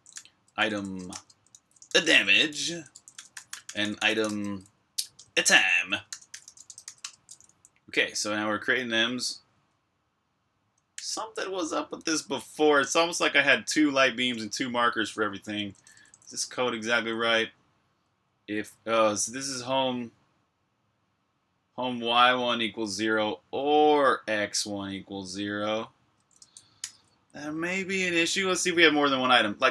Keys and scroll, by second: 0.0-4.2 typing, 5.7-9.1 typing, 10.8 j, 14.1 k, 15.5-17.8 typing, 26.7 super+b, 26.9-27.8 typing, 28.0 super+h.